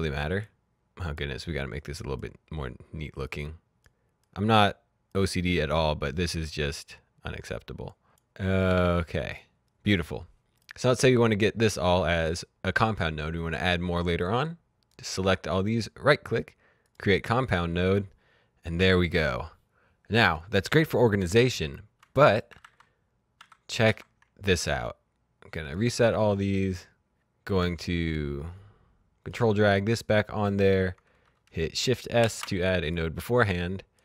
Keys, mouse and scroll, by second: 8.9 ctrl+d, 9.3 click, 14.1 click, 15.5 right click, 16.7 click, 22.2 click, 22.5 z, 23.3 z, 23.8 z, 24.5 right click, 25.4 click, 26.7 click, 29.8 click, 32.1 shift+s, 32.9 click.